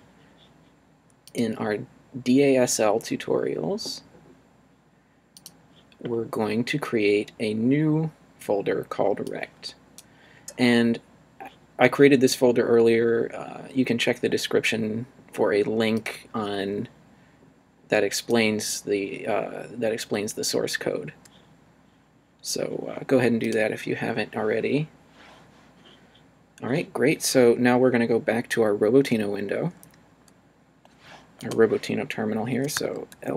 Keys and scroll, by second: 32.7 l, 33.1 s.